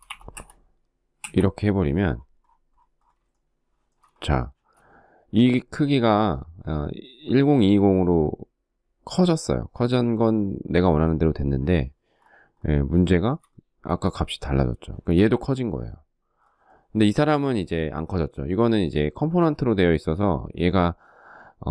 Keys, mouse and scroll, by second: 0.6 Return, 2.7 shift+middle click, 4.0 space, 12.5 shift+middle click.